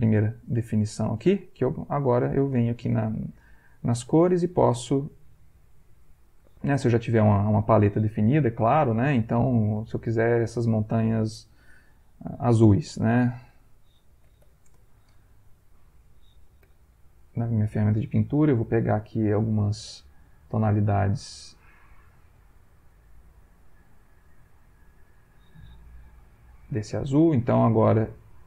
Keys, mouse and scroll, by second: 2.1 click, 9.8 Insert, 10.7 click, 13.5-15.0 typing, 16.1 right click, 16.6 b, 17.0 right click, 20.4 click, 21.6 click, 22.6-25.4 drag, 26.5 click, 28.0 shift+click.